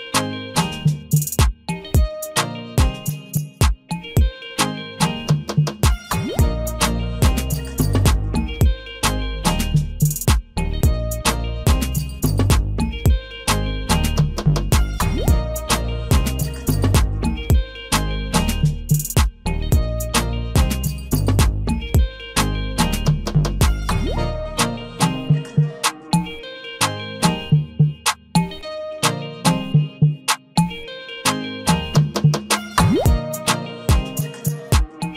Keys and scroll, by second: 2.6 ctrl+t, 19.2 ctrl+j, 24.2 ctrl+t.